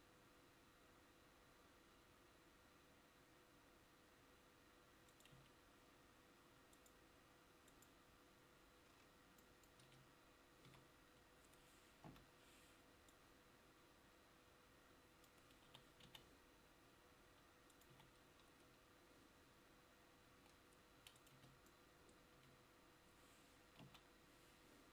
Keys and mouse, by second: 5.5 Tab, 9.9 Tab, 10.7 a, 12.2 l, 14.3-21.4 drag, 21.4 Tab, 22.5 Tab, 24.0 l.